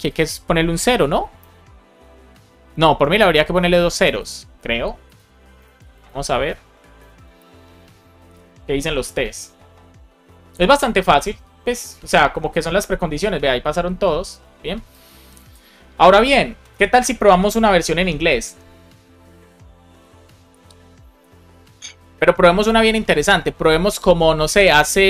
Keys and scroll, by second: 4.0 super+s, 5.5 super+s, 6.9 alt+shift+f, 7.3 super+s.